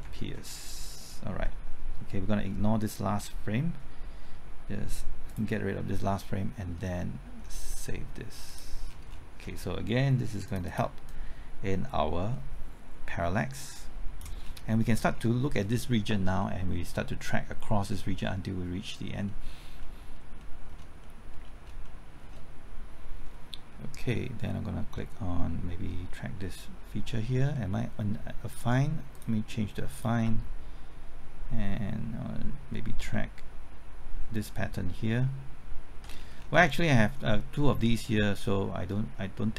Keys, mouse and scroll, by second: 3.1 Left, 5.3 click, 6.8 middle click, 8.0 middle click, 8.5 click, 8.9 scroll down 1, 10.5-14.4 drag, 14.4 scroll down 1, 14.7 middle click, 19.5 scroll up 1, 19.8 middle click, 20.7-21.0 scroll up 1, 21.0 middle click, 21.3-21.8 scroll up 1, 21.8 middle click, 22.2-24.0 scroll up 1, 29.1 click, 36.1-36.6 scroll down 1, 36.6 middle click.